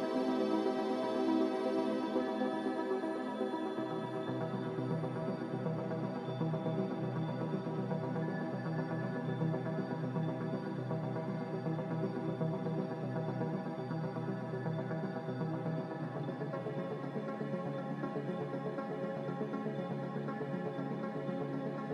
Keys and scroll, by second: 3.5 ctrl+c.